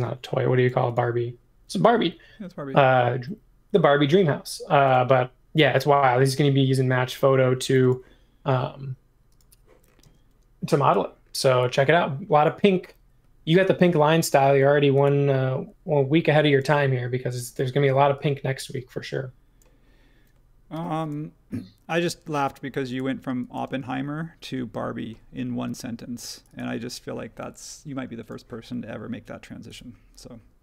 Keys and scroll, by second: 6.3 super+1, 10.0 space, 20.7 m, 23.7 space.